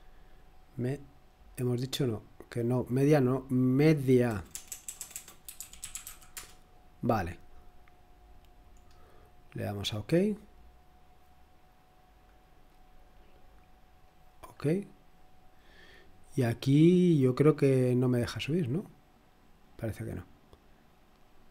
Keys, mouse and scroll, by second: 4.5-6.5 typing, 8.1-8.7 scroll down 1, 8.7-9.6 scroll down 1, 9.6 click, 13.8-14.7 scroll down 1, 14.7 click, 16.0-16.7 scroll down 2, 16.7 scroll down 1, 19.6 click.